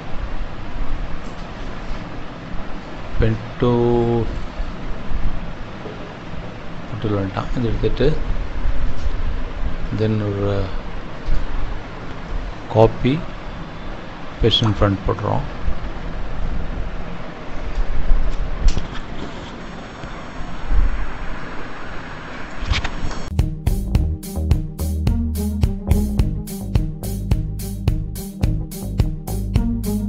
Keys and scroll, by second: 12.6 Delete.